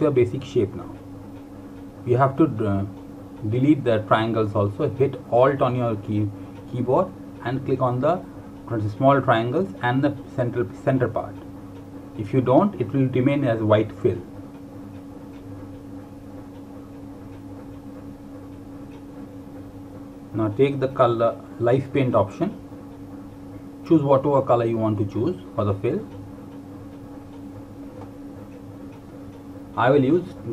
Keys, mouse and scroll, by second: 3.8 alt+Num_Lock, 4.4 click, 7.8 alt+click, 9.0 alt+click, 9.9 alt+click, 11.2 alt+click, 14.1 click, 23.9 click.